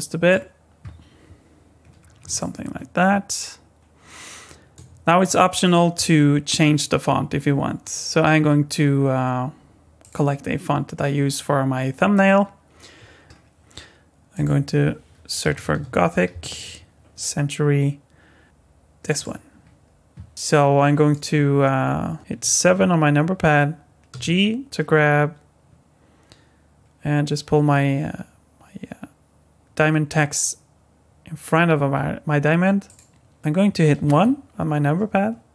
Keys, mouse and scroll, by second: 1.8-2.1 scroll up 5, 2.3 middle click, 5.1-5.4 scroll down 1, 10.0 click, 20.3 ctrl+alt+z, 20.3 scroll down 1, 20.4 middle click, 22.3 KP_7, 24.1 g, 33.4 KP_7, 34.1 KP_1.